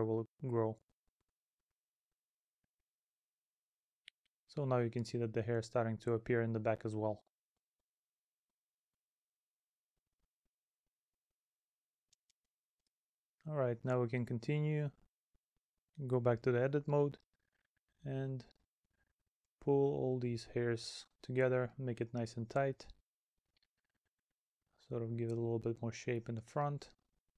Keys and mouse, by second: 2.4 middle click, 4.6 middle click, 5.9 middle click, 7.1 middle click, 9.2 middle click, 10.1 middle click, 12.1 middle click, 13.2 middle click, 15.0 middle click, 17.5 middle click, 18.6 middle click, 23.5 middle click, 26.5 middle click.